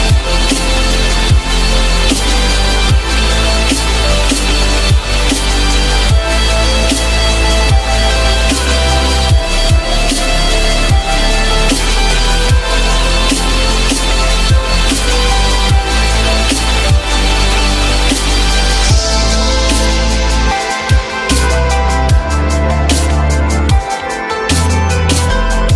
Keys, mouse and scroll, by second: 0.0 alt+middle click, 0.2 alt+double middle click, 0.6 alt+middle click, 2.2 alt+middle click, 2.4 alt+middle click, 2.5 alt+middle click, 2.6 alt+double middle click, 12.9 ctrl+click, 13.7 ctrl+click, 14.6 alt+middle click, 15.3 alt+middle click, 19.8 alt+middle click, 20.7 alt+middle click, 25.1 alt+middle click, 25.7 alt+middle click.